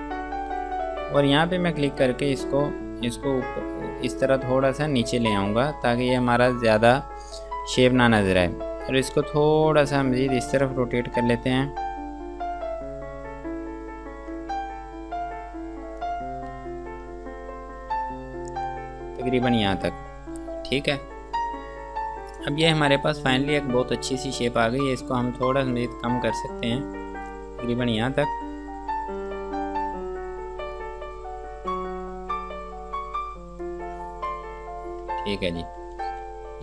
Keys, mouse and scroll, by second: 2.1 click, 9.8 click, 11.8 click, 17.7 scroll up 1, 18.4 scroll down 1, 26.0 click, 28.9 scroll up 1, 31.0 click, 35.5-36.1 scroll down 1, 36.2 ctrl+space.